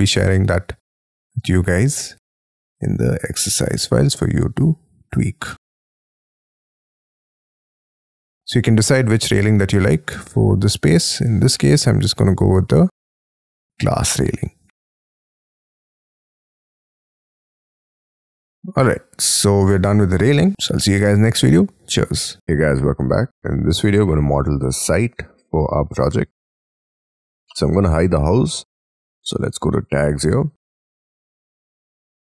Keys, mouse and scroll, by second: 0.3 middle click, 4.5-5.4 scroll down 18, 5.5 middle click, 7.4-7.8 scroll down 11, 8.0 middle click, 11.3 ctrl+z, 15.4 ctrl+z, 16.1 middle click, 17.1 Escape, 17.2 Escape, 17.7 shift+middle click, 18.2 shift+middle click, 18.6 Escape, 20.5 middle click.